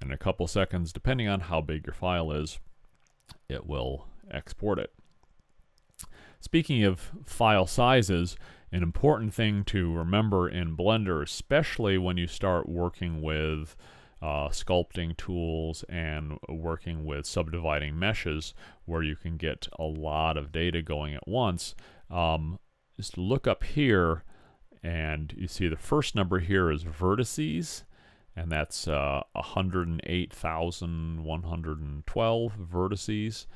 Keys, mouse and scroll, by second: 11.6-23.5 middle drag.